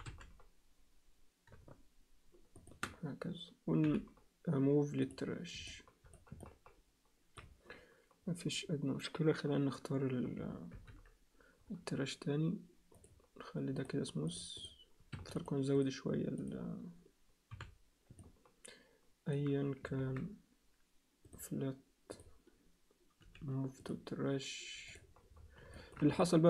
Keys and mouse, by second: 3.8 m, 5.6 alt+middle click, 6.4 alt+middle click, 10.7 alt+h, 12.9 click, 13.8 click, 14.3 click, 14.6 right click, 15.7 right click, 17.5 h, 18.2-19.3 alt+middle drag, 20.1 ctrl+z, 21.2-22.3 right drag, 23.2 m, 24.9 click, 25.7 alt+shift+middle click, 26.2-26.4 alt+middle drag.